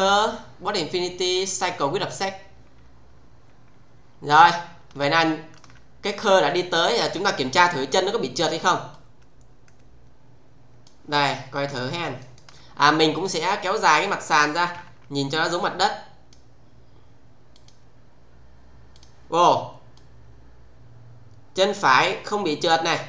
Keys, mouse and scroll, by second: 0.1 click, 2.1 click, 4.3-4.9 scroll down 1, 5.2 alt+middle click, 6.5 click, 6.9 space, 7.4 scroll down 1, 8.9-11.1 click, 11.4 scroll down 1, 11.8 alt+middle click, 12.2 alt+right click, 13.1 click, 14.7 r, 15.6-16.4 click, 17.5 click, 19.0 click, 19.9-23.0 click.